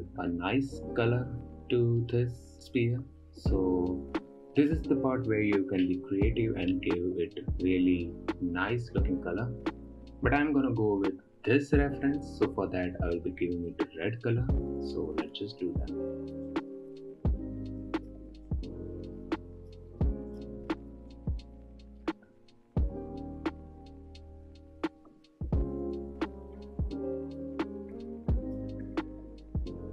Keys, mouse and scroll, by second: 2.6-3.2 scroll up 4, 3.2 click, 4.7-7.0 middle drag, 7.0-7.8 scroll up 7, 16.9-17.8 drag, 20.0-20.5 drag, 20.5 ctrl+c, 20.9 ctrl+v, 21.2 click, 21.4 ctrl+v, 22.0-23.0 drag, 24.7 ctrl+c, 24.8 click, 25.0 ctrl+v, 25.4 middle click, 25.5 scroll down 5, 25.6 middle click, 25.7 middle click, 25.9 click, 27.2 click, 28.0-28.5 drag, 28.6 scroll down 2, 28.9 drag, 29.8 drag.